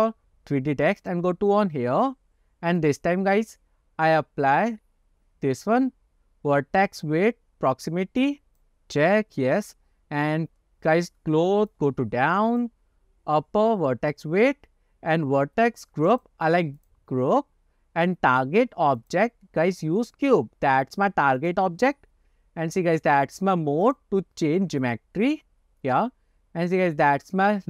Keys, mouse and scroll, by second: 1.1 click, 2.9-8.9 drag, 11.8-12.7 drag, 16.3-17.2 drag, 19.1-21.8 drag, 23.9-25.2 drag.